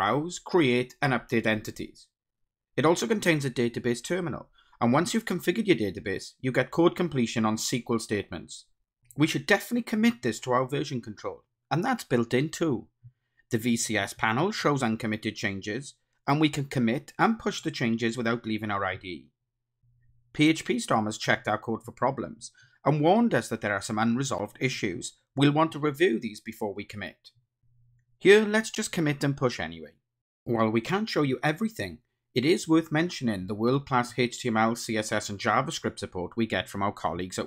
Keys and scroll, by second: 4.9 ctrl+space, 5.8 Return, 6.7 Return, 10.1 ctrl+shift+super+F12, 11.7 super+9, 28.2 super+k, 33.1 ctrl+shift+super+F12, 33.5 ctrl+shift+super+o.